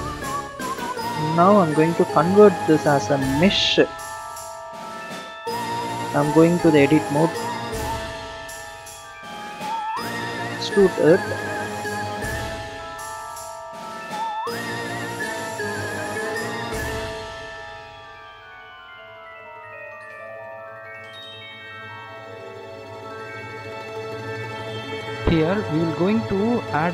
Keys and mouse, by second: 0.2-0.7 drag, 1.0 click, 4.3-6.6 right drag, 6.6 Tab, 8.0 a, 10.4 e, 18.1 click, 19.6 click, 26.2 Tab, 26.8 click.